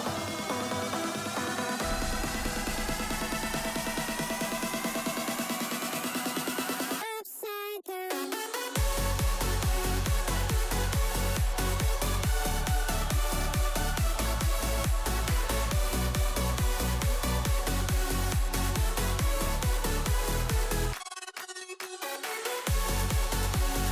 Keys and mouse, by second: 1.6 click, 1.6 middle click, 1.6 right click, 2.2 click, 2.2 middle click, 2.2 right click, 2.8 middle click, 3.1 middle drag, 3.4-3.8 shift+drag, 3.9-5.0 middle drag, 5.8 middle click, 6.2 middle click, 6.8 click, 6.8 middle click, 7.4 click, 13.0 ctrl+s, 13.9 click, 14.0 Delete, 14.3 ctrl+s, 15.5 click, 15.9 click, 16.5 shift+click, 17.7-18.8 right drag, 19.1 middle click, 19.5 shift+middle click, 20.0 middle click, 20.3 shift+middle click, 20.8 shift+middle click, 21.2 shift+middle drag, 21.6 middle click.